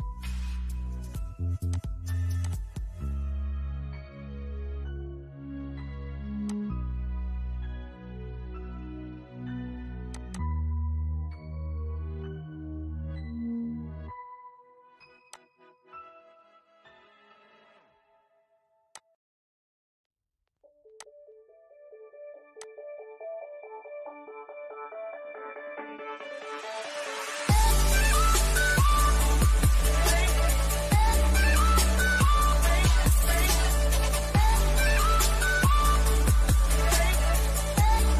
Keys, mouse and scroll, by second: 4.4-5.7 scroll up 1, 5.7-9.1 drag, 9.4 click, 10.9 scroll down 1, 12.1 middle click, 12.5-13.1 scroll up 1, 14.5-18.1 drag, 18.1-20.2 drag, 22.6 scroll down 1, 24.2 scroll up 1, 24.4-28.2 shift+middle drag, 30.0 click, 36.7-38.1 drag.